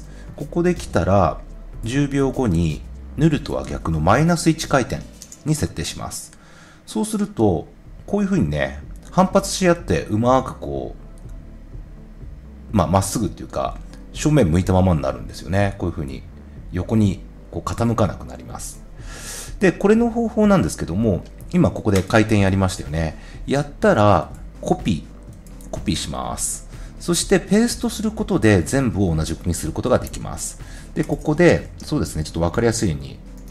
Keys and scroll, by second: 4.5 |, 33.3 r.